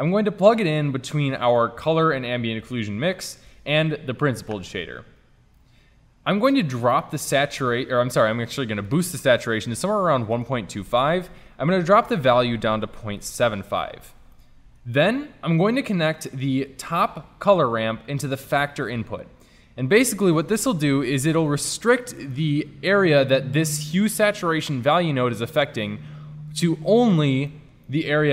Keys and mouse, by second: 0.9-2.0 drag, 5.3-5.7 drag, 6.6 middle click, 8.9-10.5 drag, 12.1-13.5 drag, 13.7-19.0 drag, 19.0-20.8 middle drag, 20.8 click.